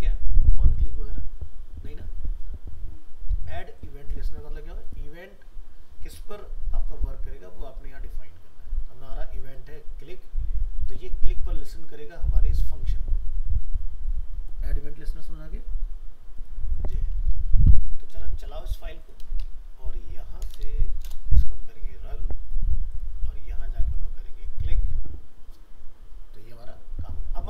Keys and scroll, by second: 17.3 ctrl+s, 19.5 alt+Up.